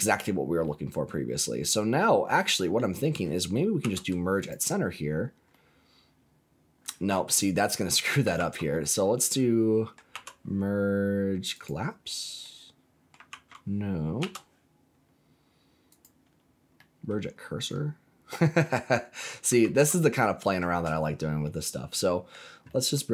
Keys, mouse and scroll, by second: 0.1 scroll up 2, 0.6-3.0 middle drag, 3.7 m, 5.1 scroll down 2, 5.5-6.8 middle drag, 8.3 ctrl+z, 8.7-9.9 middle drag, 10.1 m, 12.4-13.5 middle drag, 13.3 ctrl+z, 14.1 m, 16.7 middle click, 17.1-17.6 scroll down 3, 17.6 middle click, 18.6 middle click, 19.6 ctrl+z, 20.1 middle click, 20.8-21.4 scroll up 5, 21.4 middle click, 22.6 middle click.